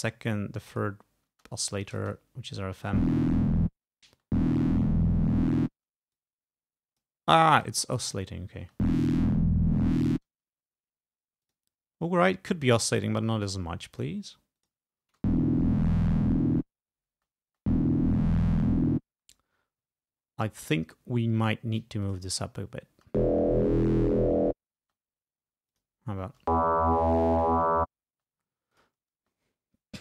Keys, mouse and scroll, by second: 0.8 click, 1.4 space, 2.1 space, 2.8 space, 3.8 space, 5.8 space, 6.2-7.3 drag, 7.6 click, 8.0 space, 10.4 space, 11.5 click, 12.3-14.2 drag, 14.7 click, 15.1 space, 17.2 space, 19.2 space, 22.1 click, 23.0 space, 25.0 space, 25.8 click, 26.3 space, 28.2 space, 28.8 click, 29.2 space, 29.9 space.